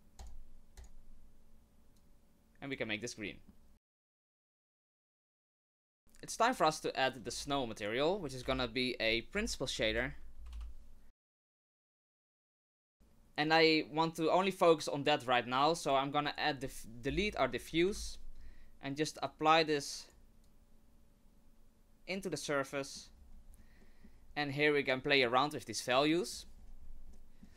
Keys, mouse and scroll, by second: 0.2 click, 0.8 click, 3.1 scroll down 2, 3.2 middle click, 3.9 click, 4.4 middle click, 4.7 click, 5.3 shift+middle click, 5.7 scroll up 1, 5.8 middle click, 7.3 shift+a, 11.8 middle click, 12.1 middle click, 12.3-12.7 scroll up 3, 12.7 scroll down 2, 12.8 middle click, 13.4 click, 16.2 click, 17.9 Delete, 19.3 click, 20.4 click, 22.8 middle click, 23.1-24.9 scroll up 8, 23.8 middle click, 24.9 middle click.